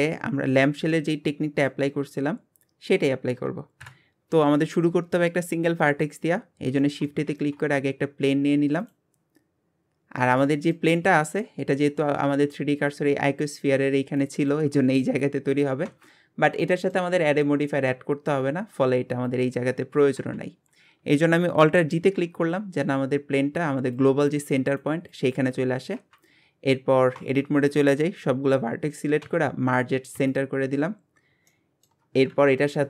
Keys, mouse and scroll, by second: 0.6 click, 0.9-2.0 middle drag, 2.0 scroll up 2, 3.8 KP_1, 6.8-7.3 middle drag, 7.3 shift+a, 9.2 scroll down 5, 10.0 scroll up 3, 10.5 shift+middle click, 10.9-11.4 scroll up 4, 14.3-15.9 scroll up 1, 16.1-16.5 scroll down 10, 16.7-18.0 shift+middle drag, 18.0-18.6 scroll up 5, 20.6-22.0 scroll down 2, 22.0 alt+g, 22.4 scroll up 2, 25.0-26.0 scroll up 1, 26.3-27.2 scroll down 2, 27.2 Tab, 29.2 m, 30.6-31.5 scroll up 9, 31.5 shift+middle click, 32.3 KP_1.